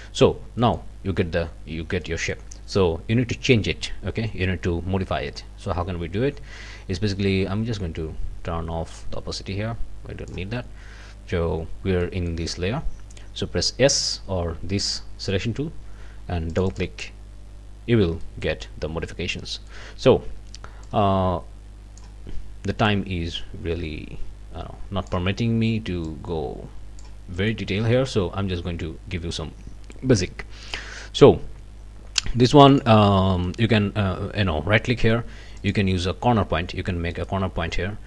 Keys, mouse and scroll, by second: 0.6 click, 2.0 click, 7.7-10.5 drag, 12.0 click, 14.0 s, 16.5 click, 17.8 scroll up 2, 18.3 click, 19.5 middle click, 19.7 click, 20.8-22.2 middle drag, 22.8-25.3 drag, 26.1-27.2 drag, 27.4 click, 27.7 scroll up 2, 33.5 right click, 35.6 click, 37.1 right click.